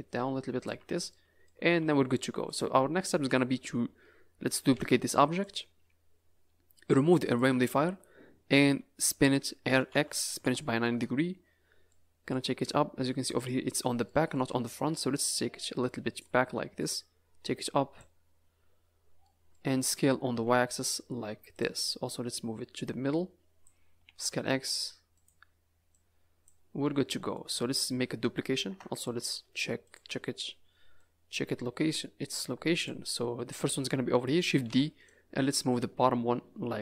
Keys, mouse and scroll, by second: 0.7 Tab, 1.1 middle click, 1.7 a, 1.8 a, 2.4 click, 2.9 scroll up 4, 4.7 shift+d, 7.2 click, 7.7 s, 9.6 r, 11.9 middle click, 12.5-13.4 scroll up 6, 13.4 middle click, 14.0 middle click, 15.1 click, 16.8 click, 18.4-19.2 scroll down 10, 19.2 middle click, 20.3 s, 22.3 click, 23.9 s, 25.9 click, 26.8 middle click, 28.6 KP_0, 29.2 z, 30.2 scroll up 3, 30.9 click, 34.6 shift+d, 35.7 click.